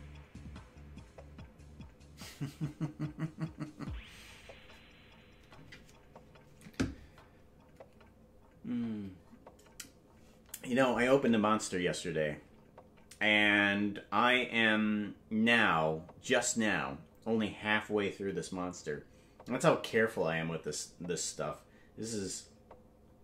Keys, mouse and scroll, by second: 13.0 typing, 16.2 typing.